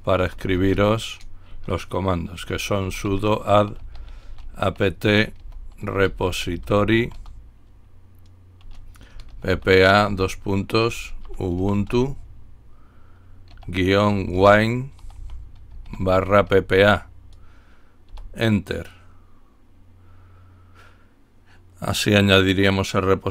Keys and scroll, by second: 0.2-7.6 typing, 9.2-18.0 typing.